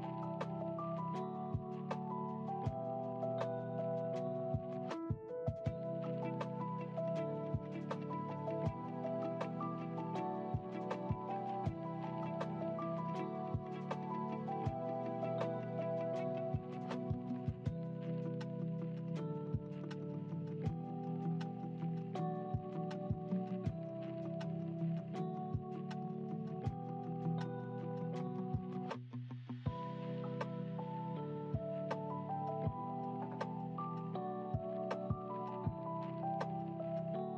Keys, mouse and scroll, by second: 0.6 g, 8.2 scroll down 2, 9.2-12.2 drag, 13.2 click, 14.6 click, 15.5 click, 17.0-18.5 s, 19.2-19.9 scroll down 3, 22.3 KP_1, 24.1 click, 26.0 click, 28.3 click, 29.4 click, 30.7-31.8 drag, 32.6 ctrl+z.